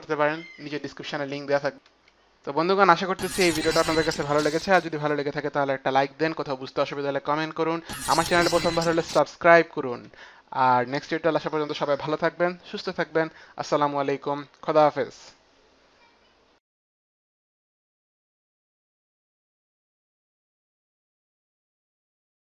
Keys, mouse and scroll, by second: 1.8 F9, 2.0 F9.